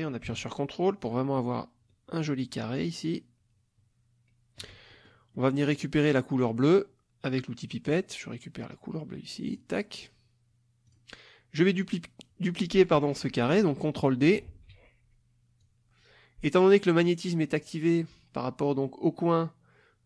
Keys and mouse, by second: 5.0 ctrl+middle click, 5.4 ctrl+middle click, 7.9 click, 9.5 click, 10.9 click, 14.5 ctrl+d, 15.6-17.2 drag.